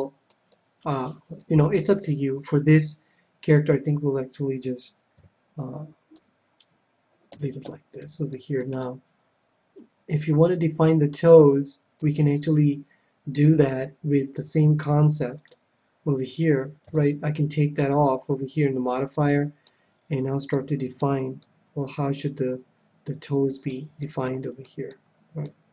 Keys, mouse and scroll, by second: 5.1 KP_7, 6.1 KP_1, 7.3 a, 7.6 a, 8.3-10.4 middle drag, 15.3-17.1 drag, 16.8 KP_7, 18.9-23.1 middle drag, 23.9-25.7 middle drag.